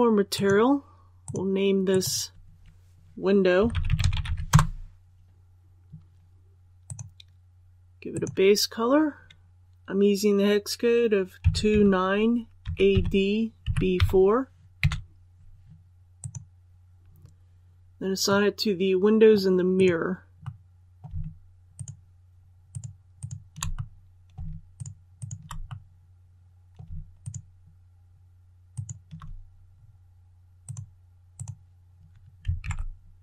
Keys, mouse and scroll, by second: 0.3 click, 3.5-4.2 typing, 4.5 Return, 6.8-9.1 drag, 11.3 KP_2, 12.6-13.9 typing, 16.1 click, 18.2 middle click, 19.7 right click, 20.4 middle click, 21.7 shift+right click, 22.6 shift+right click, 23.1 shift+right click, 23.7 middle click, 24.7 shift+right click, 25.1 shift+right click, 25.6 middle click, 27.1 shift+right click, 28.7 shift+right click, 29.6-30.5 scroll down 1, 30.6 click, 32.5 alt+a.